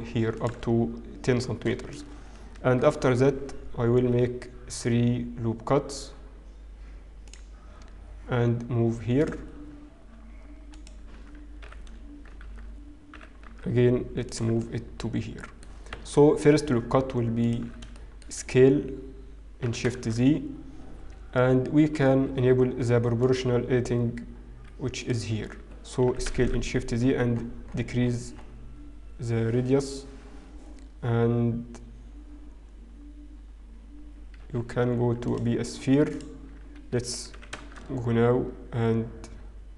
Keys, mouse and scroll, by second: 1.6-1.9 scroll up 1, 2.3 ctrl+r, 9.6 scroll up 1, 11.9 alt+click, 11.9 f, 12.5 ctrl+z, 14.7 middle click, 14.7-15.2 scroll down 1, 14.7 g, 18.2 alt+click, 18.2 shift+middle click, 18.2-18.9 scroll up 3, 18.2 shift+KP_1, 19.7 s, 23.3 click, 25.1 click, 26.1 s, 35.3 click, 37.8 s.